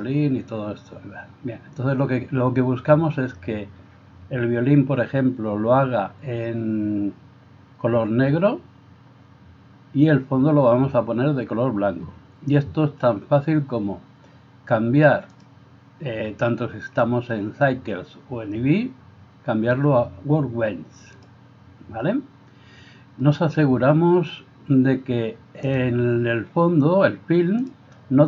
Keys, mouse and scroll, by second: 15.4-25.8 drag, 27.7-28.2 drag.